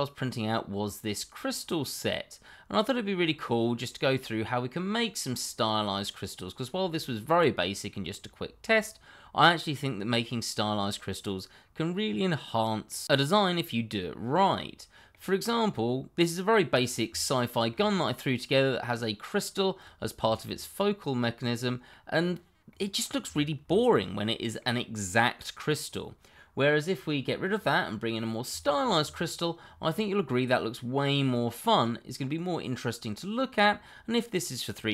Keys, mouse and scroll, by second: 9.7-10.9 scroll up 1, 10.9 middle click, 17.2 shift+middle click, 17.2 middle click, 17.3 shift+middle click, 20.2 scroll down 1, 20.4 middle click, 21.7 middle click, 22.1-22.7 scroll up 1, 22.7 middle click, 23.3 click, 23.7 shift+middle click, 23.7 middle click, 25.6-26.7 scroll up 1, 27.5 click, 29.8-30.1 scroll down 1, 30.1 middle click, 33.8-34.3 scroll up 1, 34.3 middle click.